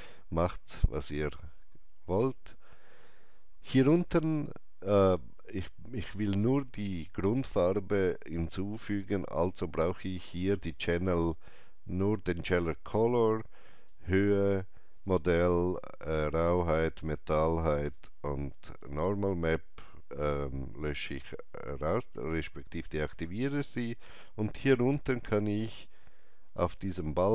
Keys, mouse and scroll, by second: 13.7 Return, 13.7 click, 13.7 typing, 14.9 click, 16.5 click.